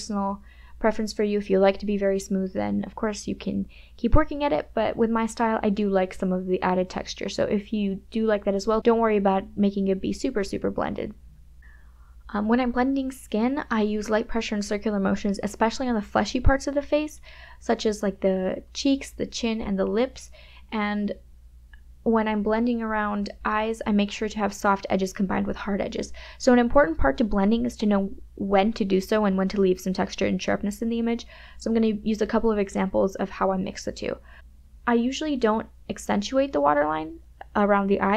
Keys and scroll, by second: 1.5 [, 1.6 ], 2.1 KP_Subtract, 2.2 KP_Add, 2.3 space, 2.6 space, 3.9 ], 6.6 ], 6.8 ctrl+KP_Subtract, 7.6 ctrl+KP_Subtract, 8.2 KP_Add, 8.9 space, 12.6 KP_Add, 12.6 KP_Subtract, 12.7 KP_Add, 14.0 KP_Add, 14.1 space, 14.7 [, 15.1 KP_Subtract, 15.2 KP_Add, 15.7 KP_Subtract, 16.2 KP_Subtract, 17.3 [, 17.8 KP_Subtract, 19.2 KP_Subtract, 19.3 KP_Add, 20.0 KP_Add, 20.5 KP_Subtract, 21.9 KP_Add, 22.0 space, 24.7 m, 27.8 KP_Subtract, 28.0 Return, 28.1 KP_Add, 29.5 KP_Subtract, 29.6 KP_Add, 34.5 m, 37.0 ].